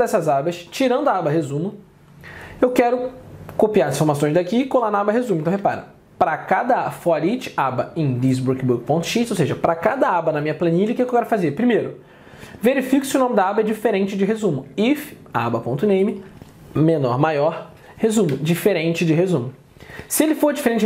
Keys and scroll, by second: 5.6 alt+Tab.